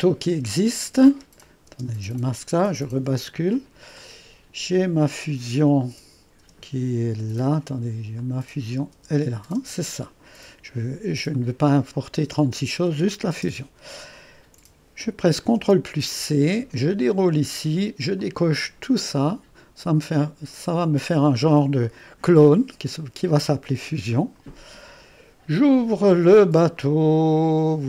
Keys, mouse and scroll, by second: 0.3 space, 1.4-3.0 drag, 1.7 typing, 3.0 typing, 4.0-5.0 drag, 4.0-7.2 typing, 8.2-9.3 drag, 9.0-10.4 typing, 11.3-12.6 drag, 12.9-13.3 typing, 15.6 ctrl+c, 17.2 click, 18.2 click, 24.1-27.8 drag.